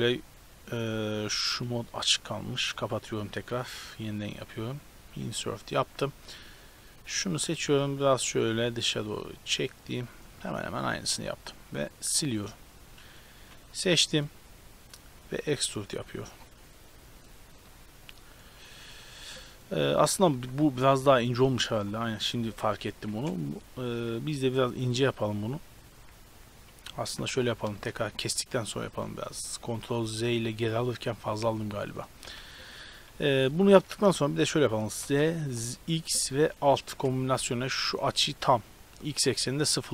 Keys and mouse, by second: 0.6 click, 0.9 ctrl+z, 1.3 ctrl+z, 3.8 i, 6.8-7.6 right drag, 7.6-10.2 middle drag, 11.2 x, 13.4 a, 15.2 e, 17.8 Tab, 19.8 ctrl+z, 20.0 ctrl+z, 20.8 Tab, 21.6 a, 23.0 KP_7, 24.5 i, 26.8 ctrl+z, 29.0-30.8 drag, 32.3 s, 35.1 s.